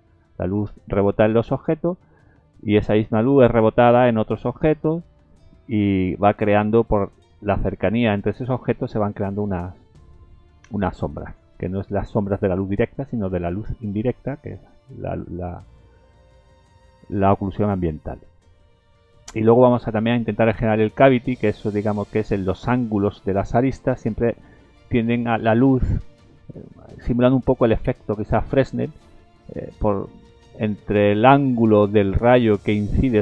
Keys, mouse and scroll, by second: 14.9 scroll up 1, 15.6 scroll up 1, 18.5 scroll down 3.